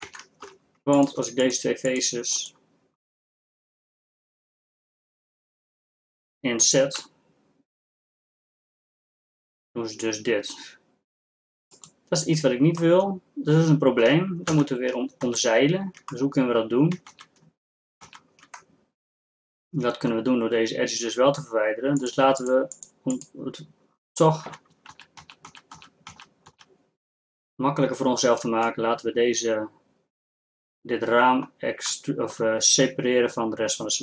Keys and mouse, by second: 0.1 ctrl+Tab, 13.5 middle click, 14.9 ctrl+z, 15.3 ctrl+z, 16.4 middle click, 17.2 ctrl+z, 18.3 ctrl+z, 20.0-25.0 middle drag, 25.0 ctrl+z, 25.2 ctrl+z, 25.6 ctrl+z, 26.0 ctrl+z, 26.4 ctrl+z, 26.6 ctrl+z, 28.8 middle click, 29.9 middle click, 30.3 middle click, 32.2-34.0 middle drag.